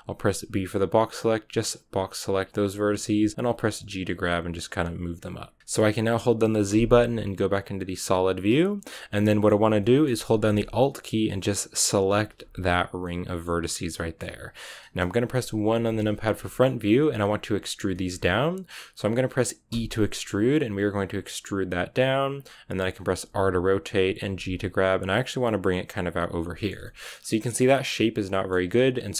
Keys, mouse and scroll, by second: 1.8 b, 2.8 g, 5.6-8.4 middle drag, 8.4 z, 9.0 scroll down 2, 9.2-11.8 middle drag, 11.8-12.9 alt+right drag, 12.9-15.6 middle drag, 15.6 KP_1, 16.3-19.6 shift+middle drag, 19.6 e, 23.1 r, 24.2 g, 26.5 shift+middle click, 27.1 scroll down 1, 27.2-29.1 middle drag.